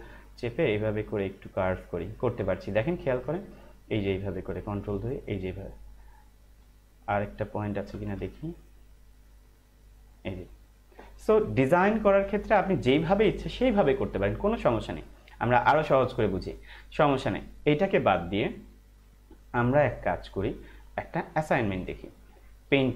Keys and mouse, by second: 0.5 ctrl+click, 4.7 ctrl+click, 8.4 ctrl+click, 11.5 ctrl+=, 13.2 -, 20.0 click.